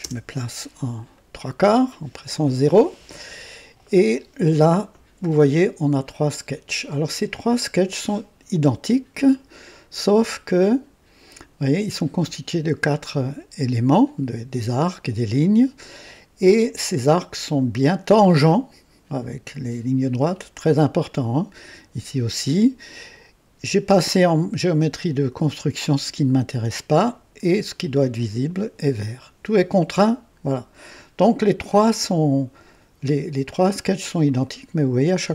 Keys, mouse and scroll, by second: 0.0 KP_0, 1.1-2.0 right drag, 10.4 click, 33.0 click, 34.3 click.